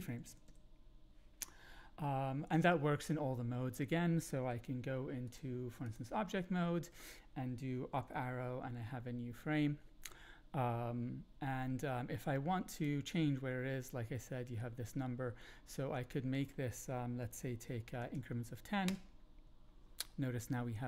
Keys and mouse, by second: 0.0 Up, 0.2 Up, 0.7 Up, 5.3-5.9 drag, 7.9 Up, 12.8 click, 16.1-20.0 drag.